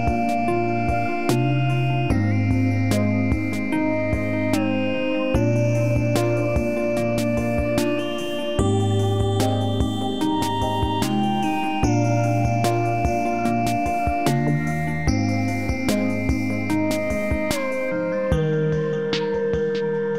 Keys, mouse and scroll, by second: 1.5 e, 3.6-7.9 drag, 8.2 w, 8.8-11.6 drag, 12.0 r, 12.4-15.5 drag, 15.6 r, 16.0-20.1 drag.